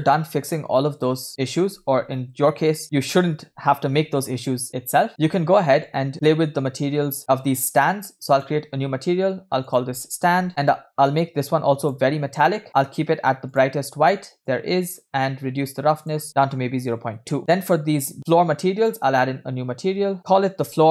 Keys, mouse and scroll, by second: 0.0 right click, 1.1 scroll down 3, 1.3 shift+middle click, 2.0 scroll down 1, 2.5 scroll down 1, 5.1 click, 6.1 click, 8.3-8.7 drag, 9.7 click, 11.2 click, 12.7 middle click, 13.5 click, 16.0-17.0 drag, 17.4 click, 18.8 click, 20.2 shift+click.